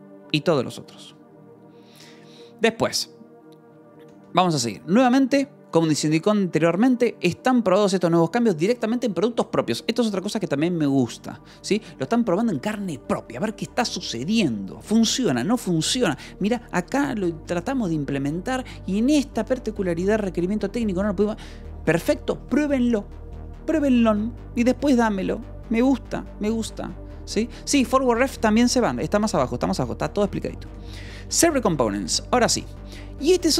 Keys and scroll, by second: 2.6 Escape, 4.0 j, 4.6 j, 15.2 Escape, 29.0 j, 29.5 k, 30.6 Escape, 31.8 shift+v, 32.0 Escape, 32.2 j, 33.2 j.